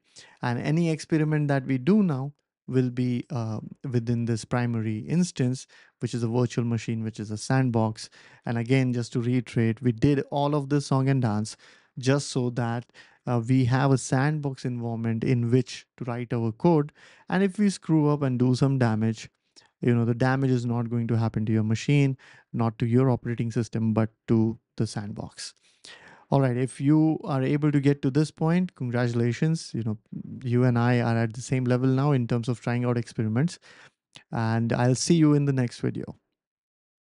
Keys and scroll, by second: 2.0 typing, 36.8-37.0 typing.